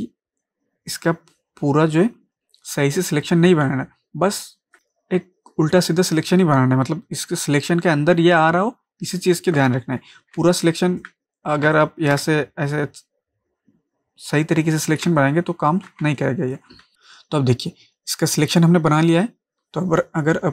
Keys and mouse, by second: 3.5 ctrl+space, 3.7 ctrl+click, 4.0 ctrl+space, 10.2 ctrl+space, 10.4 ctrl+space, 10.4 ctrl+click, 10.9 ctrl+space, 11.7 ctrl+space, 11.7-14.8 ctrl+drag, 14.9 ctrl+click, 15.1 ctrl+space, 15.2 ctrl+click, 15.6 ctrl+space, 16.2 click, 16.5 space.